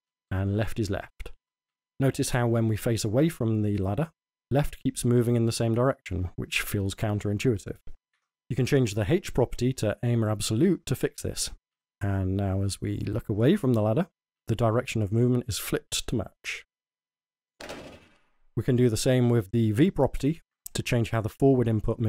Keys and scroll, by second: 0.0-2.5 typing, 4.3-8.2 typing, 11.4-16.7 typing, 17.9-19.6 typing.